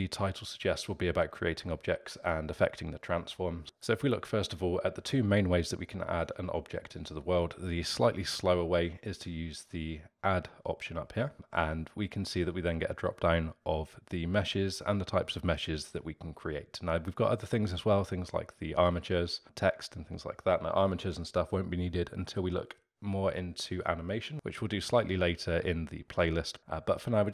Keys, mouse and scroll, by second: 11.3-13.4 drag.